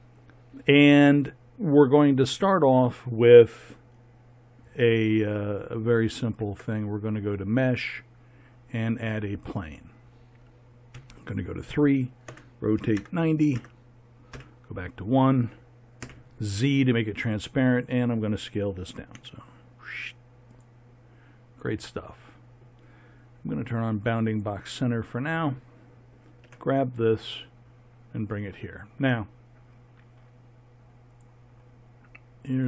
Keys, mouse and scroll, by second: 6.1 shift+a, 10.9 KP_3, 12.2 r, 14.3 KP_1, 16.0 z, 19.1 s, 26.4 g, 32.3 click.